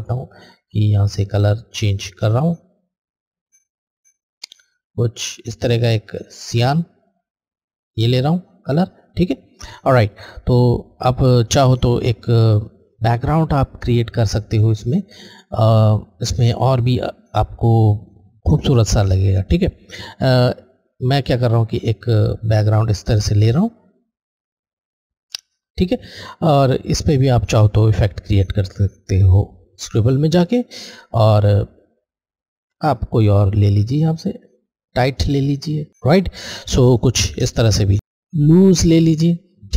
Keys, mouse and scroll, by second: 10.0 click, 10.5 scroll down 1, 14.3 click, 14.4 alt+click, 21.0 click, 21.1 alt+click, 27.0 click, 27.0 alt+Left, 29.7 alt+Left, 29.7 click, 32.8 alt+click, 35.1 alt+click, 38.3 alt+click.